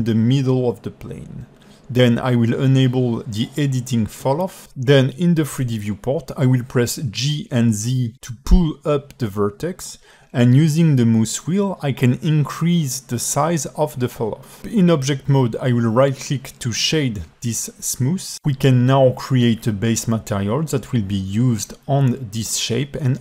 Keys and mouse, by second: 0.0 Tab, 0.4 click, 0.8 alt+middle click, 3.8 click, 5.4 g, 10.1 g, 12.6-13.6 alt+middle drag, 13.8 alt+Tab, 13.9-14.9 middle drag, 17.3-18.0 right drag, 18.5-19.6 alt+middle drag, 21.6 click, 22.2-22.5 drag, 22.7-23.2 drag.